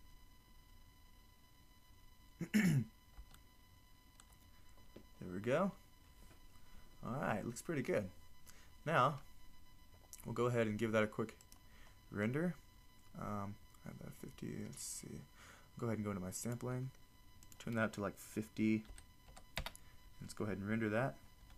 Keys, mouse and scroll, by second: 11.4-16.4 drag.